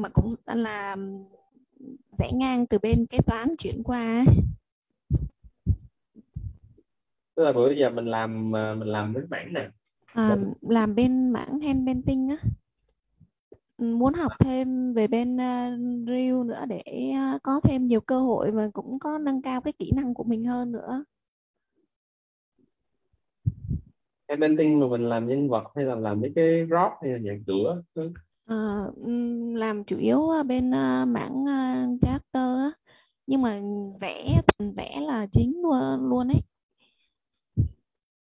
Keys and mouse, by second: 0.4-1.9 typing, 3.1-4.4 typing, 6.1 BackSpace, 6.3 m, 7.9-10.2 typing, 12.7-15.8 typing, 19.1-21.9 typing, 23.2-26.8 typing, 30.2 click.